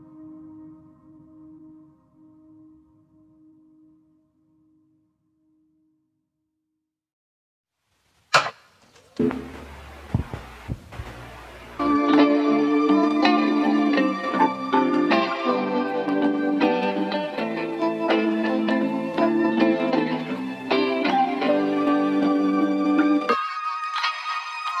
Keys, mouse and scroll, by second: 6.8-15.0 drag, 15.5-24.8 drag, 24.1-24.6 scroll down 2, 24.6 scroll up 1.